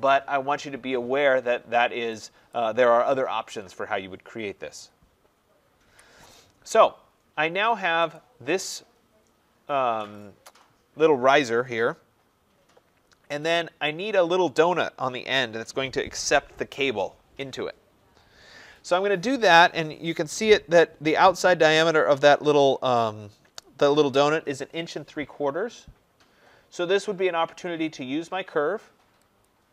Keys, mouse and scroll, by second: 2.4 click, 5.8 Delete, 6.9 middle click, 6.9 middle click, 7.0 middle click, 8.1 click, 29.4 click.